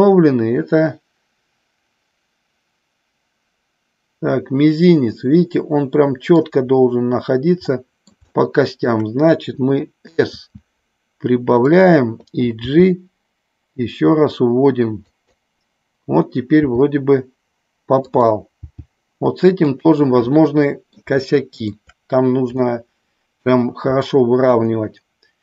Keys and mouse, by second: 7.7 middle click, 8.3-8.9 shift+middle drag, 10.2 s, 11.7 click, 12.6 g, 15.1 click, 16.6 g, 18.0 click, 18.6 g, 19.7 click, 20.3 middle click, 21.2 shift+middle click, 22.6 middle click, 24.3 KP_1.